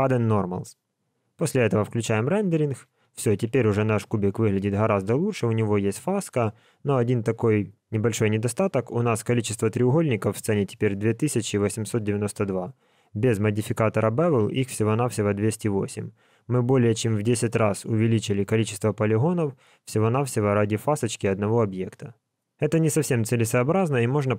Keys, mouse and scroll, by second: 1.9 click, 3.2 alt+a, 13.2 click, 16.4 click, 17.3 click, 17.9 click.